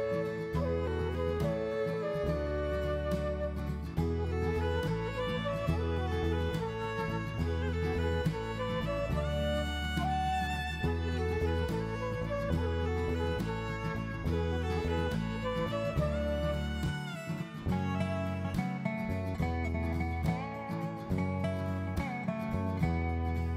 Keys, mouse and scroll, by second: 0.0 click, 1.0 click, 4.2 ctrl+shift+r, 9.6 click, 14.6 s, 18.6-20.0 scroll up 2, 20.7 click, 21.7 click.